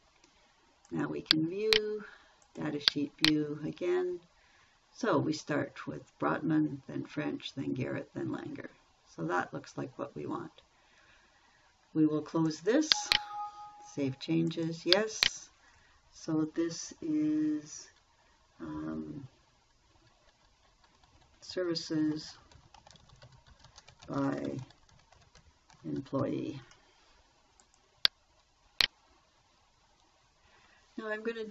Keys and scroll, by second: 22.4-26.9 typing.